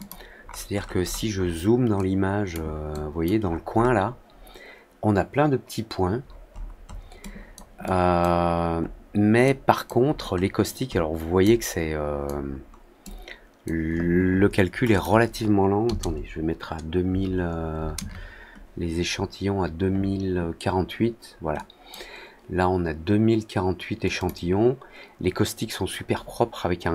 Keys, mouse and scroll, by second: 0.3 scroll up 1, 0.4 scroll down 1, 0.7-1.4 scroll up 3, 1.9 click, 2.8-3.2 drag, 3.4-3.9 scroll up 2, 6.1-7.0 scroll down 3, 7.1-7.5 drag, 7.8 click, 8.7 middle click, 9.4 click, 10.0 middle click, 10.8 middle click, 11.3 click, 12.4 middle click, 12.9 click, 14.9 click, 21.5 click, 24.1 click.